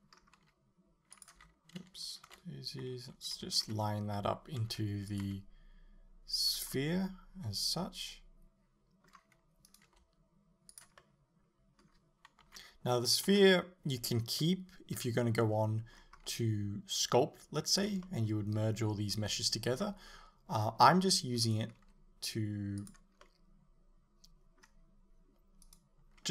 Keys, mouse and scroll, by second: 0.4-3.4 typing, 1.3 click, 4.7 r, 5.2 click, 5.3 g, 6.5 click, 6.8-9.7 middle drag, 9.7 right click, 9.9 g, 10.8 click, 11.0-17.8 middle drag, 12.5 KP_8, 13.3 KP_7, 16.4 g, 17.8 click, 18.1-21.5 middle drag, 21.5 right click, 21.9 g, 22.9 click, 23.2-25.7 middle drag, 25.7 right click.